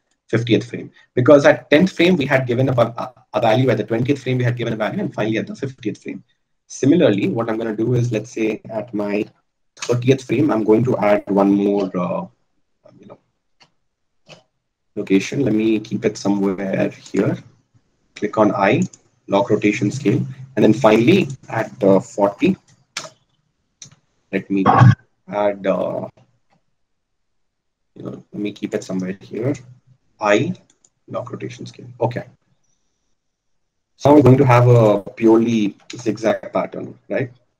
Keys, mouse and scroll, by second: 7.5-10.6 drag, 11.9 g, 12.2 x, 14.5 g, 18.5 i, 22.2-25.2 drag, 27.7 g, 31.1-34.9 right drag.